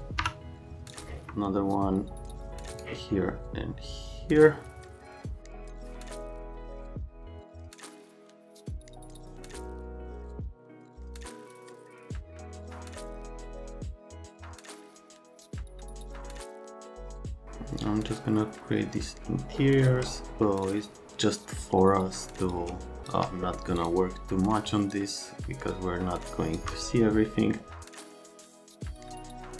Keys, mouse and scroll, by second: 7.1 F3, 7.3 click, 7.6 click, 7.7-8.9 typing, 9.3 F3, 10.3 F3, 10.5 F3, 12.0 F3, 12.5 F3, 13.6 F3, 14.6 F3, 14.9-16.6 typing, 15.0 F3, 27.9 Escape, 28.8 F3, 28.9 click, 29.3 click.